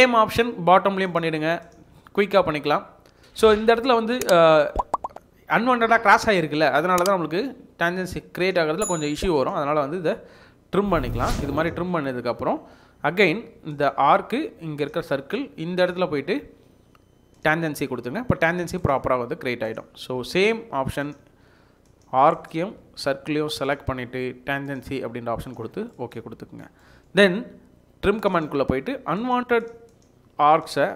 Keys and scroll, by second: 3.2 Escape, 11.7 Escape, 11.9 Escape, 12.4 Escape, 20.2 Escape, 20.4 Escape, 20.6 Escape.